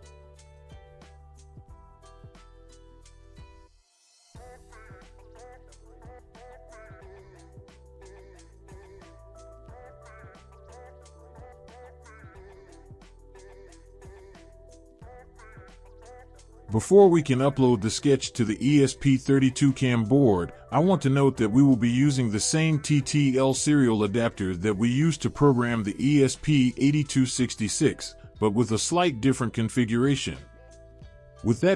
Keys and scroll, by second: 0.0-2.1 typing, 7.4-8.7 typing.